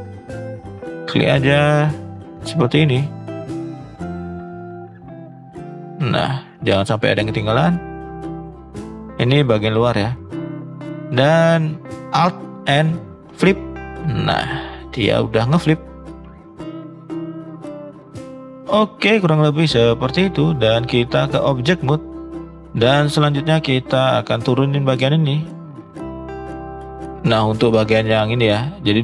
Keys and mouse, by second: 0.2 shift+middle drag, 2.0 shift+click, 3.4 middle drag, 4.5 shift+click, 5.0 middle click, 5.6-5.9 middle drag, 6.2 shift+middle click, 6.6 middle click, 7.1 shift+middle click, 8.5-9.5 shift+drag, 10.5 middle click, 11.1 shift+middle click, 11.4 middle click, 12.6 alt+n, 13.8 middle click, 14.7 middle click, 15.5 middle click, 16.0-18.6 middle drag, 19.0 middle click, 21.0 click, 22.1 middle drag, 23.7 click, 24.6 click, 25.6 shift+click, 25.9 shift+click, 26.5 click, 28.3 shift+middle click.